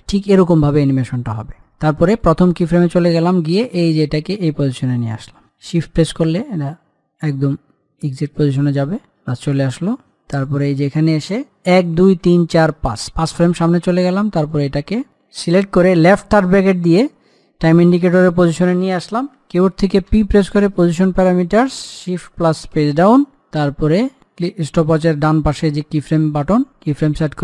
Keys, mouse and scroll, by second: 2.4-10.6 drag, 11.9 Page_Down, 14.7 click, 16.2 [, 20.4 p, 21.1 click, 23.0 Page_Down, 24.0 click.